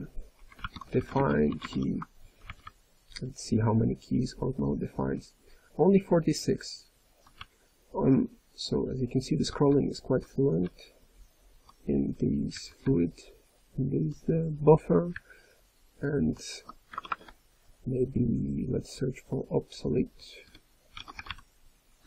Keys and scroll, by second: 2.3 ctrl+n, 2.6 ctrl+n, 3.1-3.7 ctrl+n, 3.8-4.3 ctrl+n, 4.5 ctrl+n, 4.7 ctrl+n, 5.1 ctrl+p, 5.5 ctrl+p, 5.9 ctrl+p, 6.3 ctrl+p, 6.4 ctrl+p, 6.7 ctrl+p, 7.4-9.1 ctrl+n, 9.6 ctrl+p, 10.2 ctrl+p, 10.6 ctrl+p, 11.1-11.6 ctrl+p, 12.5 ctrl+n, 12.7-13.8 ctrl+p, 15.1-16.1 ctrl+n, 16.9 alt+BackSpace, 17.1 alt+BackSpace, 21.0 BackSpace.